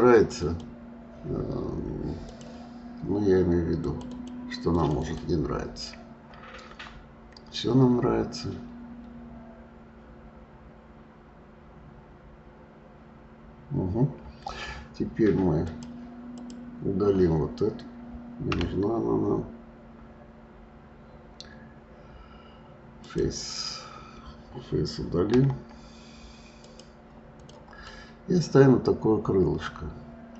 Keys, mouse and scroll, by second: 0.1 click, 0.4 click, 2.2-4.0 drag, 4.1 click, 4.6 click, 5.0 click, 6.6 scroll up 2, 7.9-11.0 scroll down 2, 15.7 click, 16.3 click, 18.5 Delete, 25.4 Delete, 27.3 click, 27.8-30.3 middle drag.